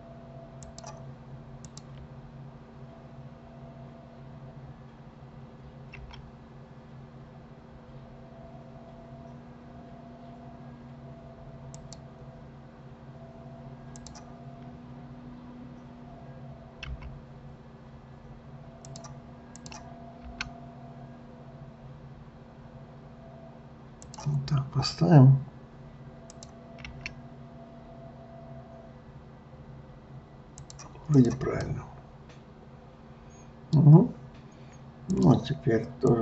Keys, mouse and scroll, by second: 1.7 click, 6.0 g, 14.0 click, 16.9 g, 19.6 click, 20.2 g, 24.5 scroll, 26.3 click, 26.9 g, 31.1 click, 31.6-34.6 middle drag, 35.0-36.2 drag.